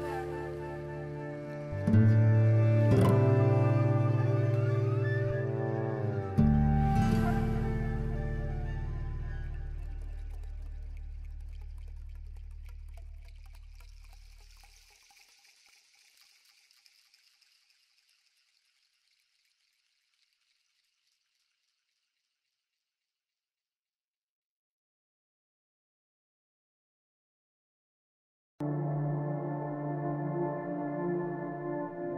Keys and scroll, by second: 18.6 ctrl+alt+1.